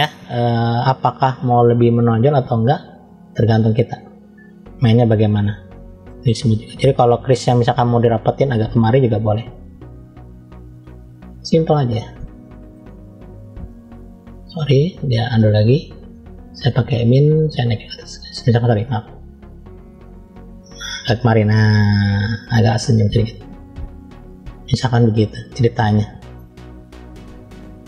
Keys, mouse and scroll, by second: 5.9 click, 7.9 click, 9.7 f, 11.6 f, 13.1 click, 15.0-16.0 drag, 17.3 click, 19.1 ctrl+z, 19.8 click, 22.7 click, 24.8 click, 25.6 middle click, 26.7-27.8 scroll down 1.